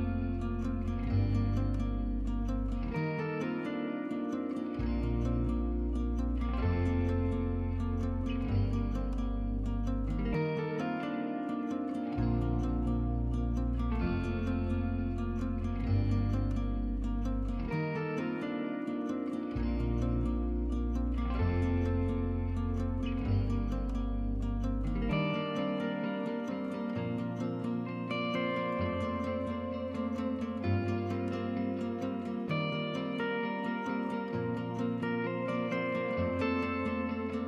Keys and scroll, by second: 8.4-10.3 typing, 22.4 z, 32.3-32.8 typing.